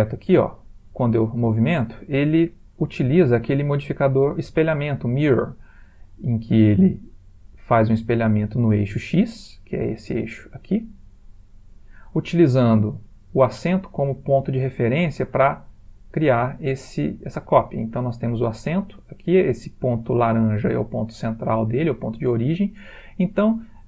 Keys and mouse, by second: 3.5 click, 15.5 g, 17.3 click, 20.2 ctrl+middle click, 20.3 ctrl+middle click.